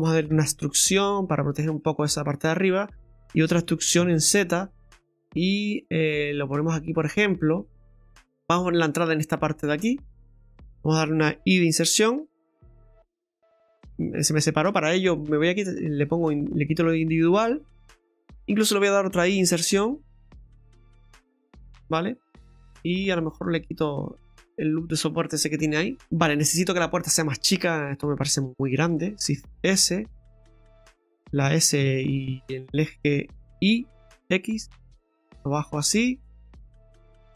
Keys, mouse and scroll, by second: 0.3 e, 2.1 scroll down 2, 2.4 middle click, 3.4 e, 8.3 scroll up 1, 8.3 middle click, 8.3 scroll down 4, 8.5 right click, 9.7 click, 10.4 right click, 10.7 shift+right click, 10.7 middle click, 10.7 scroll up 4, 12.2 i, 16.3 click, 17.1 scroll up 2, 19.4 i, 21.6-22.0 scroll down 2, 21.9 middle click, 27.0 click, 27.9 right click, 28.7 shift+right click, 29.6 shift+s, 31.4 s.